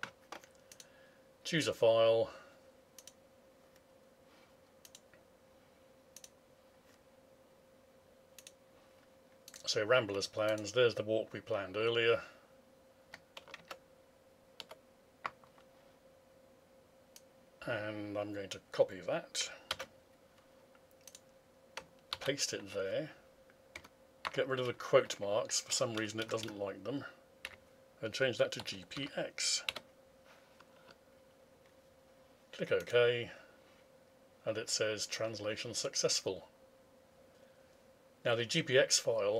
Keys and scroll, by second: 13.6 alt+Tab, 19.7 ctrl+c, 22.1 ctrl+v.